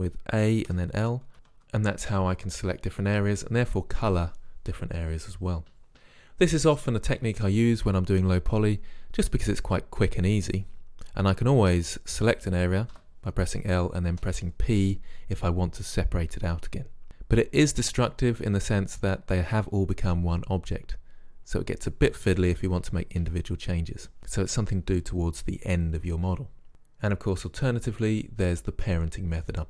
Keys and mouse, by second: 0.8 l, 1.3 l, 1.3 a, 1.6 a, 2.7 l, 3.4 a, 13.1 l, 14.3 p.